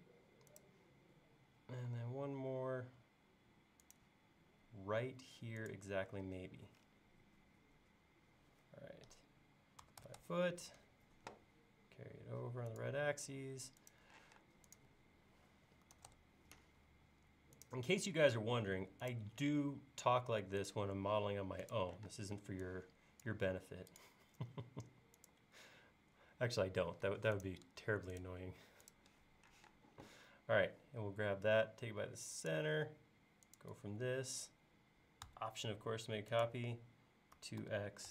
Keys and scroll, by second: 1.9 l, 9.6-10.9 typing, 14.2 p, 15.6-16.8 typing, 22.1 space, 29.6 q, 37.4 typing.